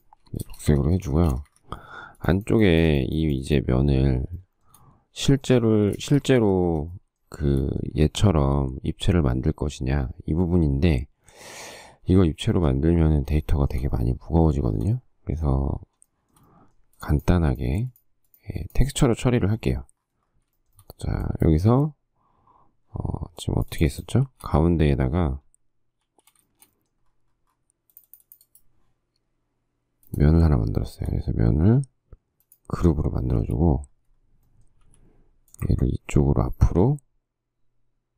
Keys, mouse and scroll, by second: 0.0 b, 0.6 space, 0.7 Escape, 1.0 Escape, 1.5 space, 1.9 Escape, 4.6 shift+middle click, 6.3 Escape, 6.3 space, 6.6 Escape, 7.6 shift+middle click, 13.7 shift+middle click, 14.7 shift+middle click, 16.3 shift+middle click, 20.8 shift+middle click, 21.0 shift+middle click, 24.5 shift+d, 26.2 shift+s, 26.8 shift+middle click, 30.7 shift+middle click, 33.4 shift+middle click, 35.0 m, 36.2 m.